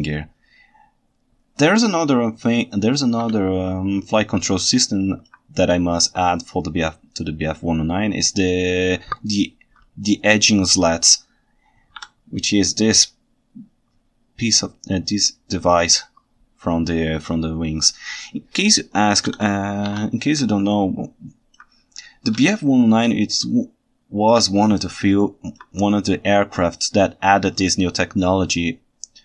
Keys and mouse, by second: 3.3 KP_7, 4.5-5.3 ctrl+alt+right drag, 19.9 alt+a, 20.6-21.6 ctrl+alt+right drag, 22.5-24.4 ctrl+shift+right drag, 24.4-24.7 ctrl+middle drag, 24.8-25.6 ctrl+alt+right drag, 25.9-27.4 ctrl+shift+right drag, 27.1 ctrl+shift+middle click, 27.4-29.2 ctrl+shift+middle drag.